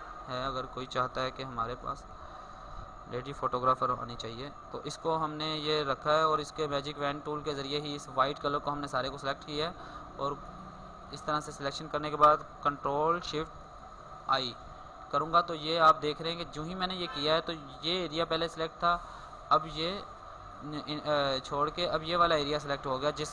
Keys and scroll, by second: 13.8 ctrl+shift+i.